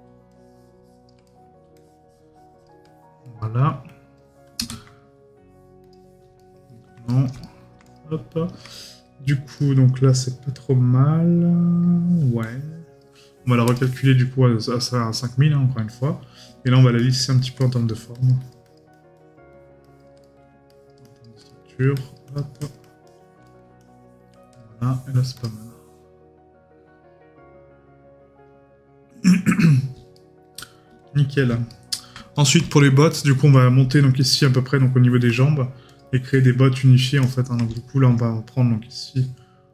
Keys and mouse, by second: 1.2 right click, 6.4 right click, 8.8 right click, 17.6 right click, 20.2 right click, 21.5 right click, 23.4 right click, 30.1 right click, 31.7 right click, 37.7 right click.